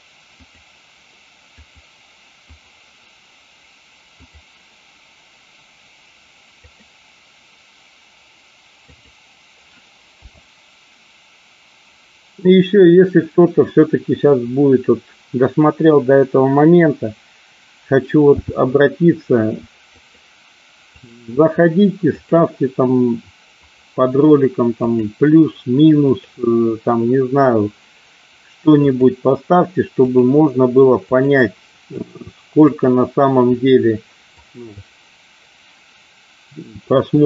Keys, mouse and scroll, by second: 18.4 k.